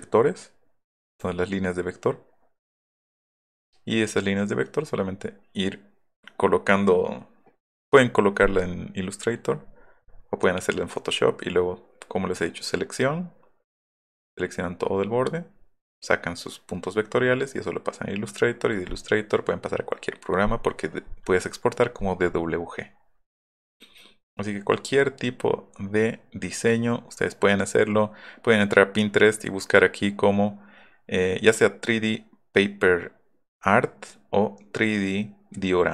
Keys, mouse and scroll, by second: 22.9 scroll down 2, 24.0 scroll down 1, 25.2 scroll down 1, 25.7 scroll up 1, 26.4 scroll down 1, 27.3-28.1 scroll down 2.